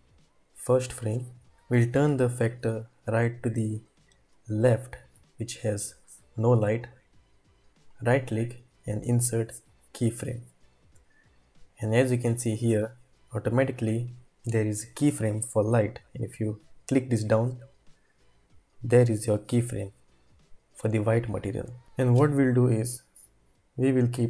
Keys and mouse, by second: 0.4-1.3 drag, 2.9-5.2 drag, 8.0-10.4 drag, 10.4 typing, 16.9 click, 24.0-24.2 drag.